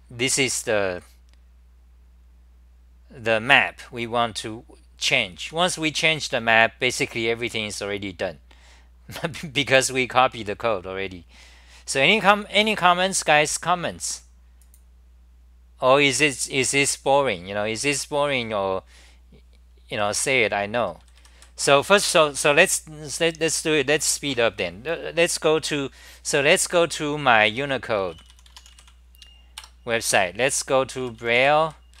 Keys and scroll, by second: 1.7-3.8 scroll down 25, 3.8-5.4 scroll down 9, 5.4 Home, 5.4 scroll down 1, 6.8-12.2 scroll down 58, 20.1 d, 27.5 4, 29.7 Return, 30.5 b, 31.0-32.0 b.